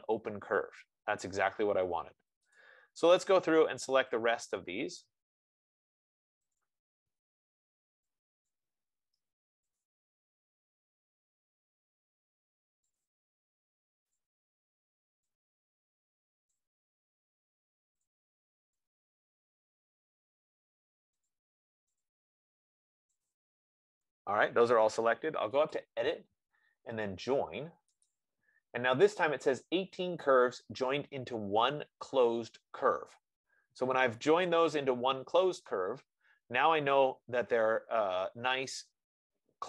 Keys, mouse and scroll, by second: 0.0 click, 2.7 click, 5.4 click, 6.8 click, 8.8 click, 10.1 click, 10.9 click, 13.4 click, 14.6 click, 16.8 click, 18.4 click, 21.5-28.4 drag, 30.2 click, 37.9-38.9 scroll, 38.9-39.6 scroll.